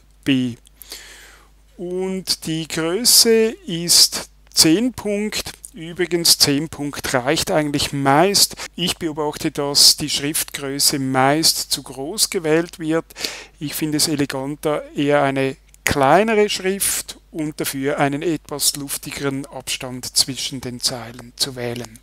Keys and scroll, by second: 0.1 super+b.